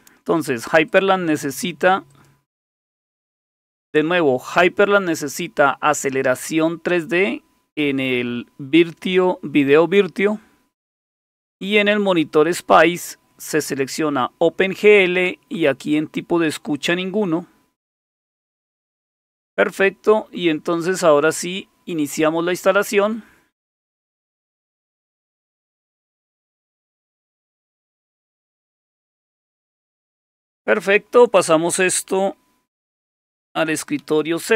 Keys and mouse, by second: 0.9 click, 2.1-26.1 drag, 34.0 shift+super+=.